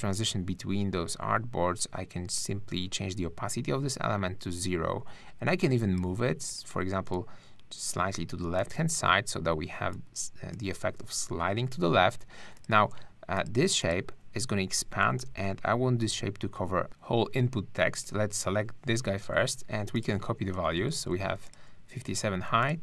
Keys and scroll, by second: 15.2 super+-, 20.5 super+a, 20.9 super+c.